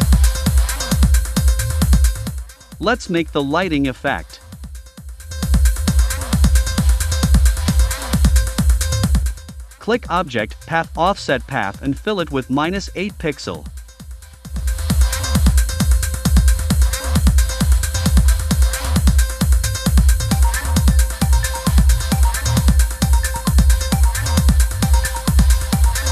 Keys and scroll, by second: 16.1 -, 18.6 8, 21.8 BackSpace, 22.4 9.